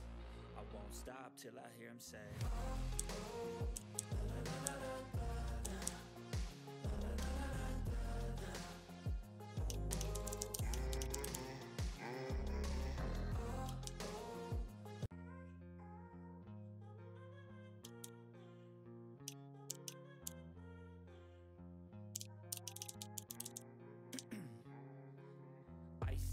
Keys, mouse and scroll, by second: 0.1 click, 1.6 click, 2.9-6.3 typing, 3.2 click, 4.2 click, 5.2 click, 6.0 click, 7.2 ctrl+scroll down 1, 7.5 ctrl+scroll up 1, 7.6 click, 9.1 click, 9.6-11.7 typing, 12.1-13.8 drag, 13.8 ctrl+a, 14.2-17.8 drag, 17.9 click, 18.0 ctrl+d, 18.2 click, 19.6 u, 20.2 i, 22.1-24.0 typing, 24.1 ctrl+a, 24.5 click.